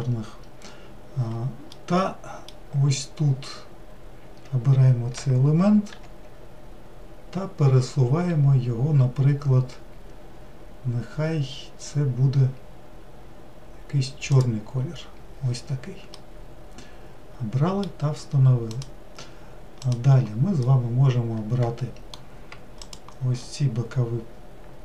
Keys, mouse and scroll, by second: 6.0 g, 16.2-18.8 middle drag, 18.8 click, 20.0 click, 20.7-23.0 middle drag, 23.0 shift+click.